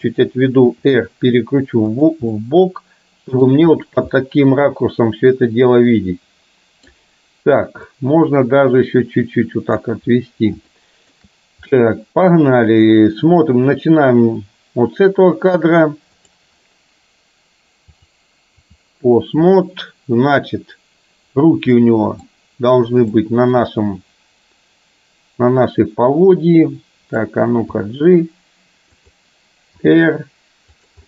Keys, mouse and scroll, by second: 1.6 r, 2.4-3.5 middle drag, 4.2-6.9 middle drag, 8.1-9.9 drag, 10.7-11.2 shift+middle drag, 16.1 click, 18.0-19.7 drag, 21.9-22.2 middle drag, 23.1-23.7 drag, 23.7-27.2 middle drag, 27.7 g, 29.9 r.